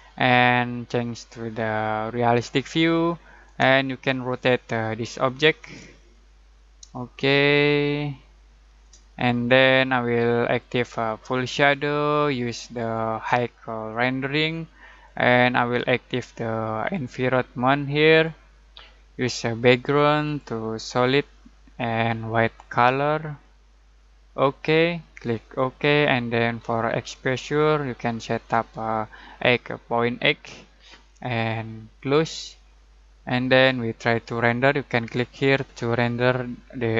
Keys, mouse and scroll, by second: 3.9-5.8 alt+shift+middle drag, 5.8-6.3 alt+scroll down 2, 6.3-6.9 alt+scroll up 2, 7.0-8.9 alt+shift+middle drag, 10.6-23.5 alt+drag, 32.0 alt+click, 32.8-34.0 alt+middle drag.